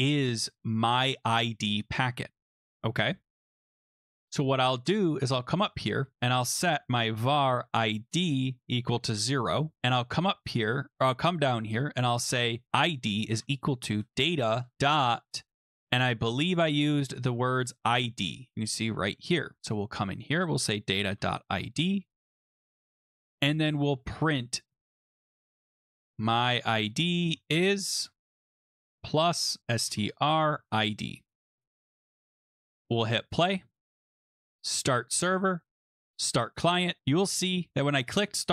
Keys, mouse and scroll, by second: 0.0 Escape, 0.0 Return, 0.8 click, 3.8 click, 4.9-6.1 scroll down 4, 6.1 click, 6.4-9.1 typing, 8.2 scroll, 9.8-10.1 scroll, 10.5 click, 11.6-12.7 scroll down 5, 12.4-15.2 typing, 12.8 scroll, 16.3 click, 17.4-18.2 typing, 17.7 click, 19.2 click, 19.7 click, 20.4 click, 20.8-21.7 typing, 23.0 middle click, 23.4 Return, 23.6-31.0 typing, 31.4 ctrl+s, 33.0 click, 34.2 click, 34.8 click, 36.2 click.